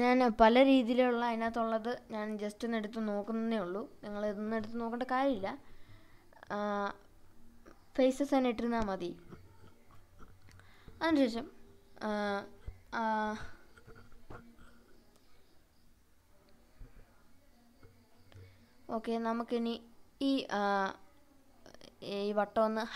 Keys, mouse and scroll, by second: 3.0 click, 9.6 click, 15.4 click, 16.0 click, 16.8-17.4 scroll down 3, 17.3-18.0 middle drag, 18.8 click, 19.7 click, 21.8 h.